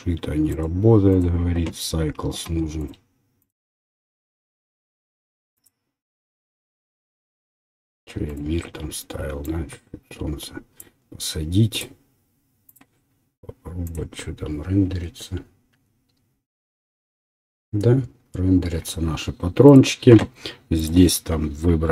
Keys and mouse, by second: 0.5-4.6 drag, 4.6-5.7 middle drag, 6.7 click, 8.3 click, 9.4-11.9 drag, 11.9 middle click, 12.7 click, 13.0-15.1 middle drag, 20.8-21.9 drag.